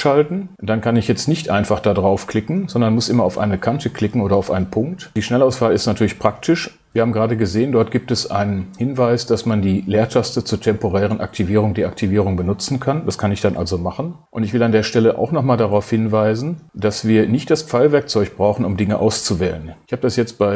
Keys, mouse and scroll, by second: 13.5 space.